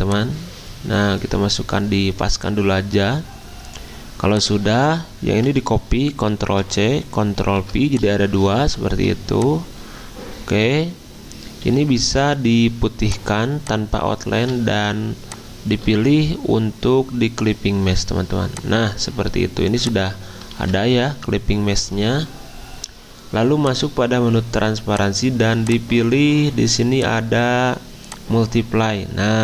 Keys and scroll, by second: 6.5 ctrl+c, 7.4 ctrl+f, 8.6 ctrl+z, 11.6 d, 20.5 ctrl+z.